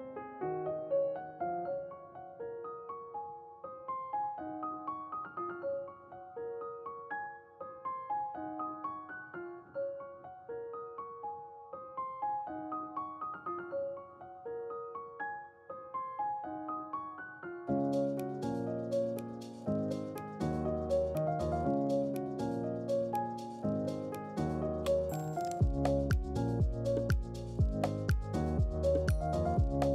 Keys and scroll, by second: 7.3-7.6 typing, 15.0 y, 25.5 1, 26.2 Return.